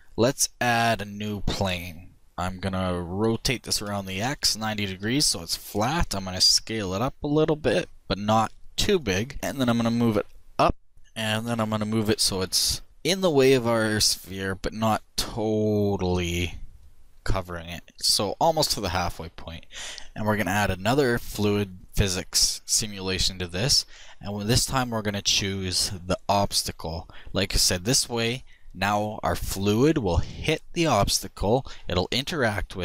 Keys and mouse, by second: 1.3 shift+a, 2.1 middle click, 2.2 r, 5.7 s, 9.7-10.9 drag, 10.9 KP_1, 14.2-15.9 drag, 22.0-25.8 drag, 25.9 click, 27.1-29.0 middle drag.